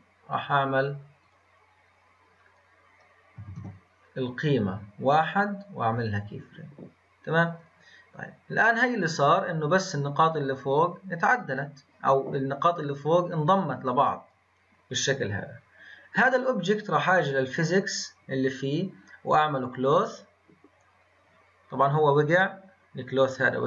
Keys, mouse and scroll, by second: 1.2 click, 3.4 ctrl+z, 4.4-5.9 drag, 7.6-10.7 drag, 12.7-15.3 drag, 16.7 click, 19.3-20.7 drag, 20.7-22.2 scroll down 11, 22.2-23.2 scroll up 6.